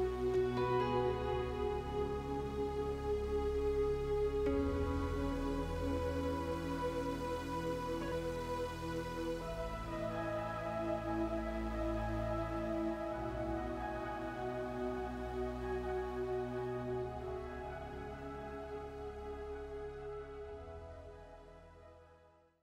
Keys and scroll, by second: 5.4 space, 8.3 space.